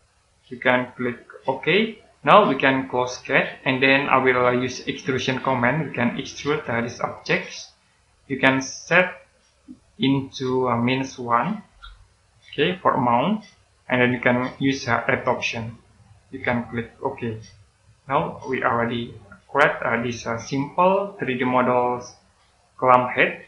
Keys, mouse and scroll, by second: 10.2 click, 11.6-12.4 typing, 13.4 click, 18.4 right click, 19.5-20.0 scroll down 1, 20.0 middle click, 20.7 right click.